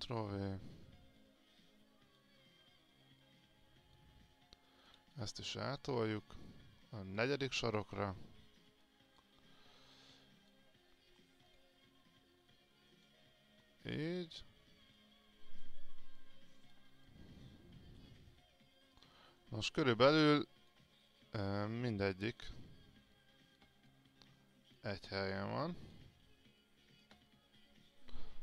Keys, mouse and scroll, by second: 1.4-5.1 drag, 5.6 alt+click, 6.5 click, 8.1-9.0 scroll down 1, 9.0-16.2 drag, 17.3 alt+click, 19.0 click, 21.3 alt+click, 22.2 alt+click, 23.2 click, 24.1 alt+click, 27.5-28.4 alt+drag.